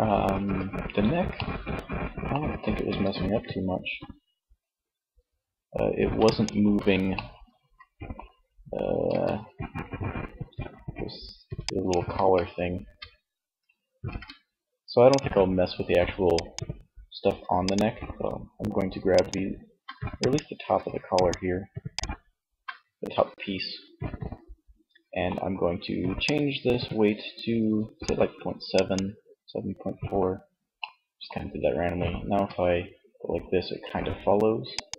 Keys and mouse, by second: 2.0 r, 5.6 click, 5.8 ctrl+z, 8.2 r, 11.3 ctrl+z, 11.8 Tab, 12.9 ctrl+Tab, 29.1 Tab, 31.5 r.